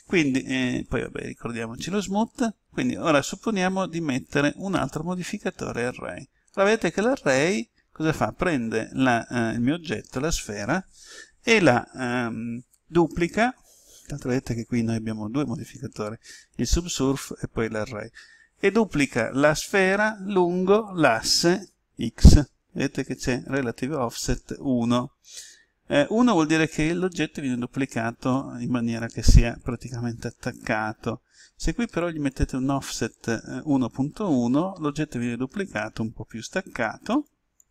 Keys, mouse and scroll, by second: 1.5 click, 7.0 middle click, 8.3 scroll up 1, 32.2 click.